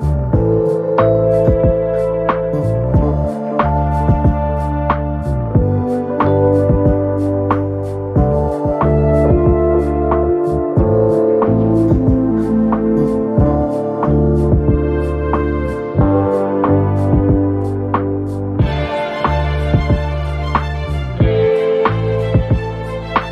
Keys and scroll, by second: 1.7 Delete.